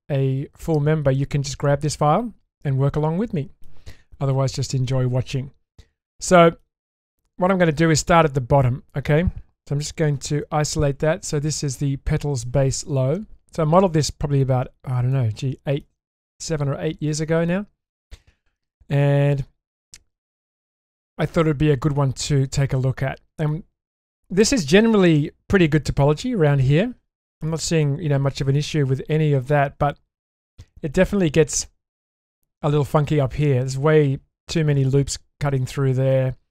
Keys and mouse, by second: 5.8-6.6 middle drag, 6.9 middle click, 13.0-14.4 middle drag, 15.1-15.8 shift+middle drag, 17.5-19.0 middle drag, 21.0 click, 21.5-23.5 middle drag, 24.6 middle click, 25.7-26.0 shift+middle drag, 27.5 middle click, 28.6-29.4 middle drag, 29.8-30.5 shift+middle drag, 31.2-31.7 middle drag.